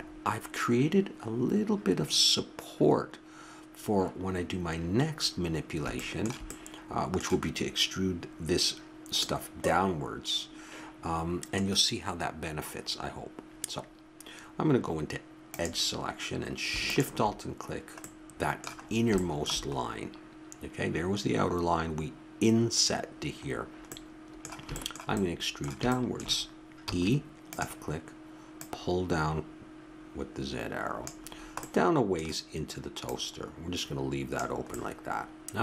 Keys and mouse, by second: 5.5-8.5 middle drag, 9.1 middle click, 10.0 middle click, 11.0-15.5 middle drag, 15.5-18.3 drag, 18.0 middle click, 18.8-21.1 middle drag, 23.5-24.5 middle drag, 26.8 e, 28.6-30.4 drag, 31.3 middle click, 33.0-35.1 drag.